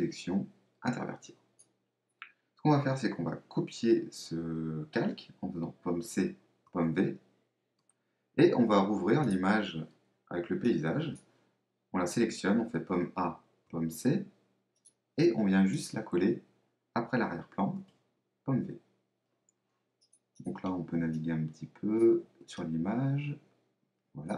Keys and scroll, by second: 6.0 super+c, 6.7 super+v, 12.7 super+a, 13.7 super+c, 17.8 super+v.